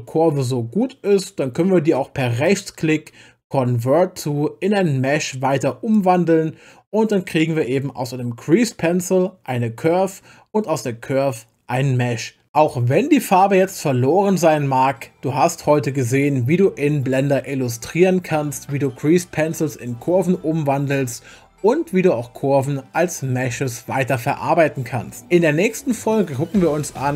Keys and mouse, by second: 2.4-6.1 right drag.